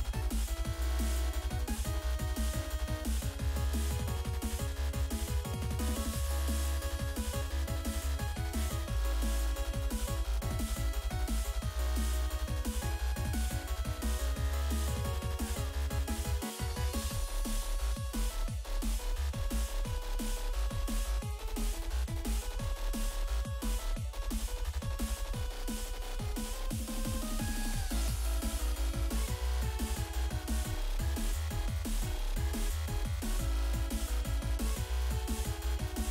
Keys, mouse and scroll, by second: 0.7-2.3 typing, 0.8 click, 0.9 click, 1.5 click, 3.6 click, 4.3 click, 4.4 click, 5.2 click, 5.9 click, 6.4 click, 6.6 ctrl+click, 7.9 ctrl+click, 8.4 click, 9.6 click, 10.0 ctrl+click, 10.6 click, 11.1 ctrl+click, 11.5 click, 12.4 click, 12.6 ctrl+click, 13.0 ctrl+click, 14.5 click, 15.8 click, 17.9 click, 18.2 click, 18.5 click, 19.6 click, 20.4 click, 20.9 ctrl+click, 21.5 click, 22.0 click, 22.9 scroll up 2, 23.1 click, 23.5 ctrl+click, 24.9 click, 25.2 click, 25.7 click, 26.2-26.6 scroll down 1, 27.4 click, 28.2 ctrl+click, 29.4 click, 30.7 click, 31.3 click, 32.9 click, 33.4 click, 34.0 click, 34.8 click, 35.7 click.